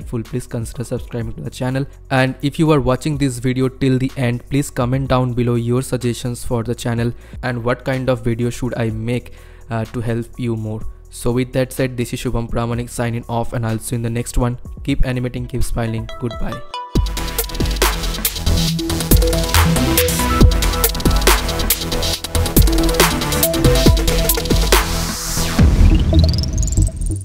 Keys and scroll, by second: 1.9 space.